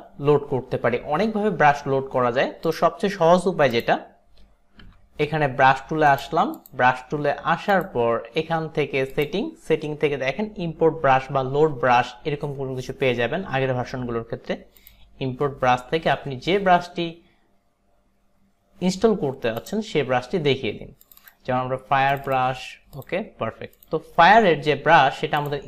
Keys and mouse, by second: 3.8 click, 5.0 b, 6.2 right click, 6.6 click.